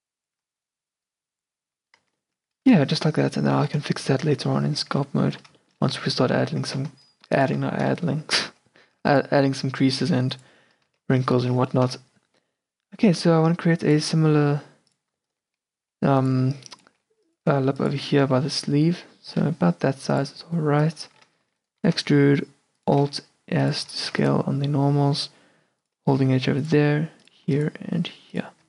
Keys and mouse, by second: 0.5 a, 1.7 Tab, 2.1 middle drag, 2.1 a, 2.5 q, 4.1-5.1 middle drag, 5.1 q, 5.3 click, 5.4 Tab, 6.0 z, 6.8 a, 6.9 c, 9.0 g, 10.1 e, 11.0 ctrl+z, 12.0 e, 13.6 r, 14.1 g, 15.9-18.4 typing, 18.6 middle click, 19.1 middle click, 19.5 middle click, 20.9 middle click, 21.5 e, 21.9 alt+s, 23.1 r, 23.9 a, 24.3 ctrl+r, 26.3 ctrl+r, 27.6 ctrl+r.